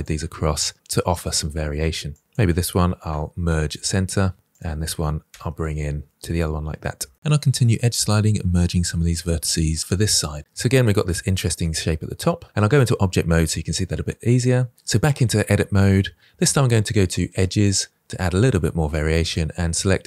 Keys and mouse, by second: 0.1 middle click, 0.6 click, 2.0 click, 2.7 m, 3.4 middle click, 5.0 g, 5.2 g, 5.8 g, 6.4 click, 6.6 middle click, 7.1 shift+middle click, 7.3 click, 7.7 click, 8.0-9.5 typing, 8.6 click, 9.6-10.7 drag, 10.9 shift+click, 11.1-12.1 drag, 12.2 Tab, 12.6-14.4 drag, 19.0 middle click.